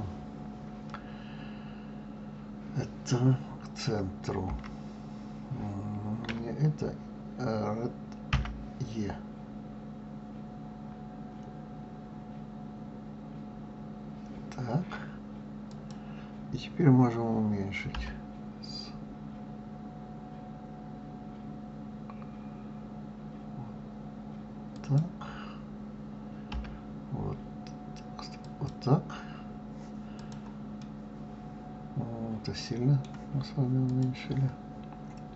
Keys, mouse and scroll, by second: 4.5 g, 8.3 e, 17.9 s, 26.5 s, 30.1 click, 30.8-33.8 middle drag, 33.9 click.